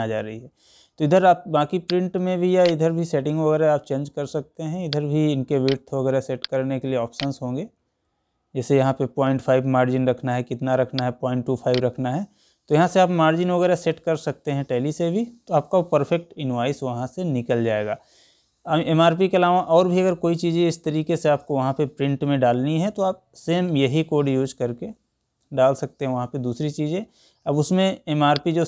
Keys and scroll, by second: 16.1 Escape.